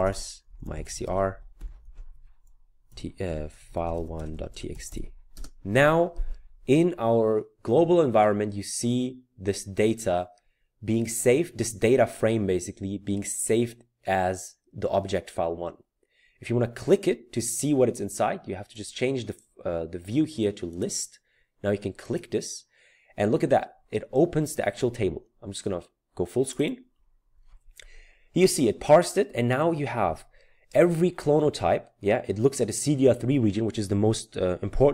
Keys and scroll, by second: 0.0-7.0 typing.